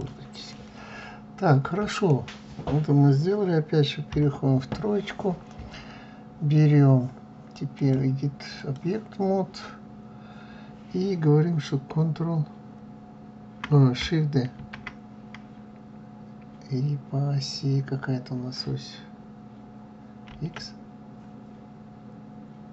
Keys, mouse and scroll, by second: 0.4-3.4 middle drag, 7.6-10.7 drag.